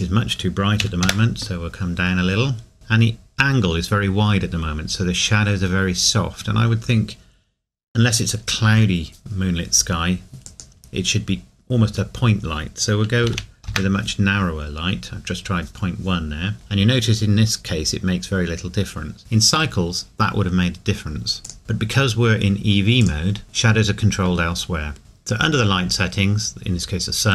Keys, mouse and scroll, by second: 2.5 scroll up 1, 10.5 click, 13.2 KP_Decimal, 21.4 click, 23.0 click, 25.8-27.3 scroll up 1.